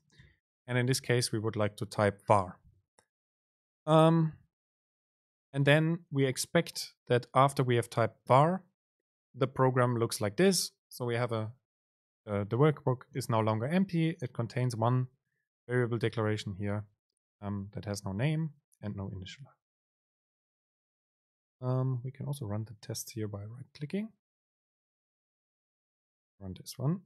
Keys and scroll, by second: 24.7 ctrl+shift+r.